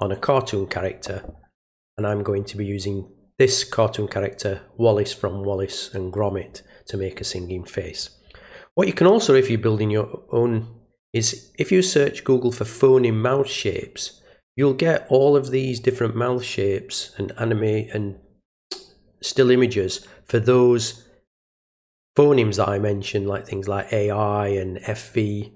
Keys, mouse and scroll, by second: 1.9 click, 9.2 click, 11.2 click, 15.6 click.